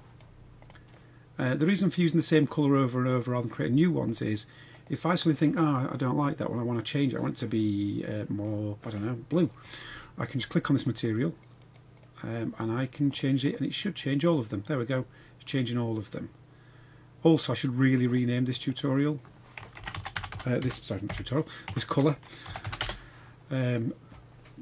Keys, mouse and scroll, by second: 0.5 click, 1.5-2.4 drag, 3.1 click, 4.1-4.9 drag, 5.5-8.5 middle drag, 8.9 click, 10.8 click, 10.9-13.1 drag, 13.4 click, 18.7 click, 18.9-22.9 drag.